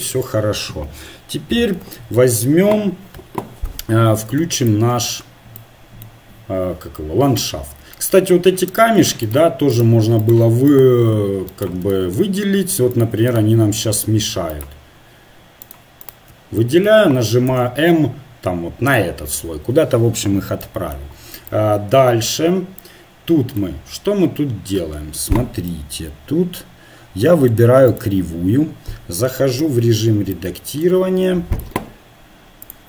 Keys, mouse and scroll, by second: 0.9 KP_7, 4.7-6.3 drag, 6.3-7.4 middle drag, 7.9 middle click, 8.7 right click, 9.5-12.0 drag, 12.0 middle click, 12.2-14.9 drag, 17.4 m, 20.2-23.6 middle drag, 23.9 middle click, 27.9 click, 28.7 right click, 29.6 Tab, 30.3 click, 32.7-32.8 drag.